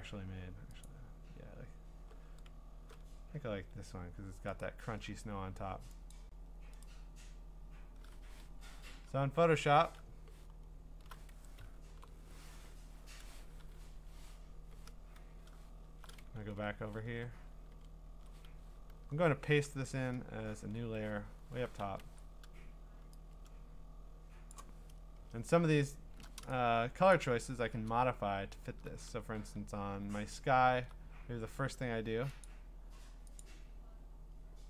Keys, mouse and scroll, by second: 1.2-3.9 drag, 4.6-6.1 right drag, 6.1 click, 8.4 Escape, 8.9 alt+Tab, 10.5-11.4 scroll, 11.9 ctrl+n, 13.9 Escape, 15.7 scroll, 16.4 ctrl+Tab, 17.0 ctrl+Tab, 17.7 ctrl+Tab, 18.5-19.0 scroll, 19.7 ctrl+v, 21.1-21.8 ctrl+scroll, 21.8 ctrl+t, 24.5 click, 25.4 alt+Return, 25.6 scroll, 27.1 click, 28.2-28.7 scroll, 30.6 scroll, 31.2-31.7 scroll, 32.4 click, 33.4 click, 33.6-34.6 scroll.